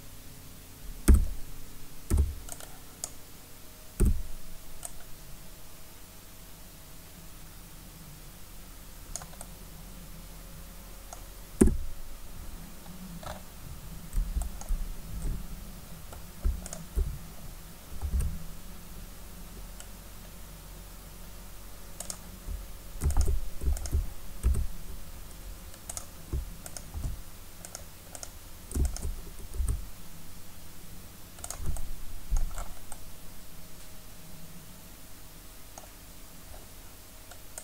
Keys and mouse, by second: 1.1 z, 2.1 b, 4.0 z, 4.9-5.9 drag, 11.6 KP_1, 16.7-18.1 right drag, 18.1 s, 24.5 s, 26.1-28.2 drag, 26.4 space, 26.9 space, 29.5-31.4 right drag, 29.6 s, 31.5-33.6 drag, 33.6 middle click.